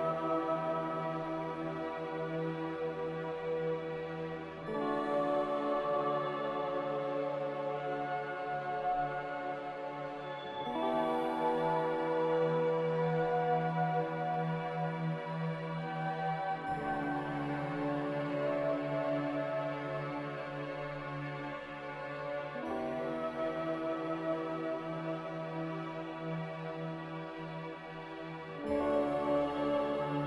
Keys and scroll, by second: 9.2 n, 19.5 z, 21.5 z, 24.9 z, 26.7-27.7 typing, 29.3 n.